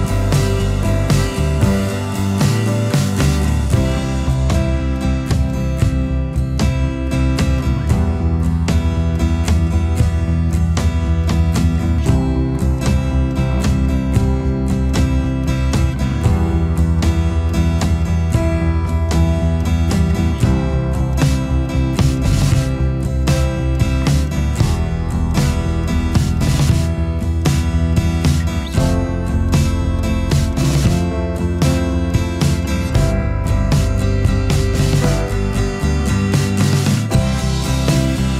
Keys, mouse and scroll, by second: 0.7 alt+scroll down 1, 0.9 ctrl+shift+a, 1.1 space, 1.4 alt+scroll down 1, 2.1 space, 2.5 alt+scroll up 1, 4.5 ctrl+shift+a, 4.7 alt+scroll down 1, 4.7 space, 5.7 space, 7.9 space, 8.4 alt+scroll down 1, 8.5 space, 12.0 space, 13.9 ctrl+z, 14.2 space, 15.5 alt+scroll down 1, 15.6 space, 16.1 space, 19.5 alt+scroll down 1, 19.6 space, 19.8-20.2 alt+scroll up 2, 22.5 space, 23.0 alt+scroll up 1, 24.4 space, 25.7 space, 29.6 alt+scroll down 1, 29.6 space, 29.9-30.3 alt+scroll up 1, 31.0 space, 32.3 space, 33.8 space, 35.7 alt+scroll down 1, 35.7 space, 36.0 alt+scroll up 1, 38.1-38.3 alt+scroll up 1.